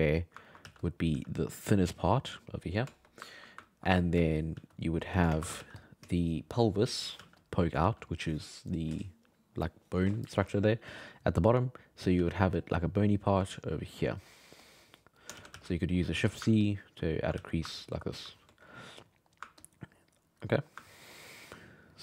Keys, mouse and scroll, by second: 0.0 click, 0.4 ctrl+middle click, 0.6 f, 1.1 f, 1.6-2.9 drag, 2.9-4.2 shift+middle drag, 4.2 f, 4.5 f, 5.0 middle click, 5.3 shift+space, 5.6 f, 6.1-7.2 shift+middle drag, 7.2 f, 7.8 f, 10.9 f, 12.2 f, 12.6-14.1 drag, 14.1 middle click, 14.6 click, 15.2 middle click, 15.3 shift+c, 15.5 f, 15.8 middle click, 16.1 f, 16.6 ctrl+click, 17.4 f, 17.8-18.8 ctrl+drag, 18.8 middle click, 19.6 ctrl+click, 20.5 middle click, 21.1 ctrl+click, 21.6 middle click.